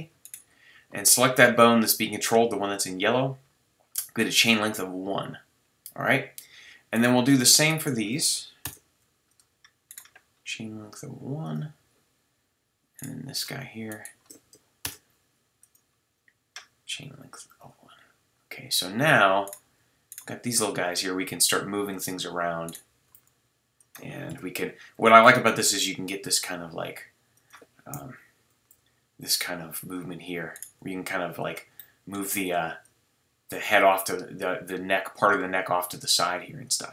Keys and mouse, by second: 8.6 shift+i, 14.8 shift+i, 20.6 g, 21.9-22.7 drag, 23.1 g, 24.3 KP_7, 25.2 g, 27.9 KP_3, 27.9 KP_6, 28.5 g, 29.9-31.5 drag, 30.8 g, 31.8 middle drag, 32.8-34.2 drag.